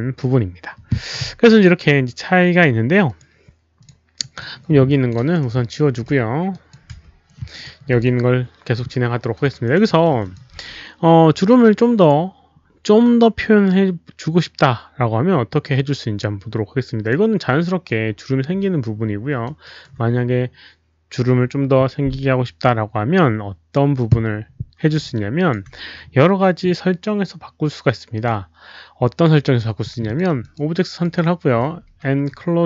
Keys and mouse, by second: 3.0 click, 3.7 click, 4.1 click, 4.8 click, 6.1 Delete, 6.5 click, 6.9 Delete, 7.5 click, 7.8 click, 8.8 Delete, 8.8 click, 8.8-11.0 typing, 9.6 alt+right click, 9.9 alt+middle click, 10.2 alt+click, 11.9 alt+click, 12.0 Delete, 13.0 alt+click, 17.5 alt+click, 18.3-19.4 typing, 18.5 alt+middle click, 18.5 alt+right click, 18.5 alt+click, 19.4 alt+middle click, 19.6 alt+right click, 20.7 alt+right click, 20.7 alt+click, 20.7 q, 22.6 alt+click, 23.7 alt+right click, 23.9 alt+click, 24.0 alt+right click, 25.1 alt+click, 28.1 alt+click, 29.4 alt+click, 29.4 alt+right click, 30.0 click, 30.1 alt+right click, 30.4 alt+click, 31.0 alt+click, 31.8 ctrl+a, 31.8 alt+click.